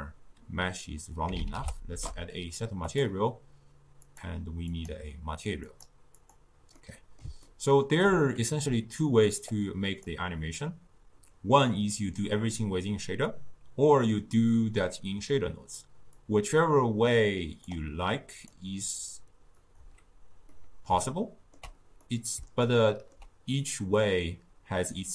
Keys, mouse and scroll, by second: 5.0-25.1 drag.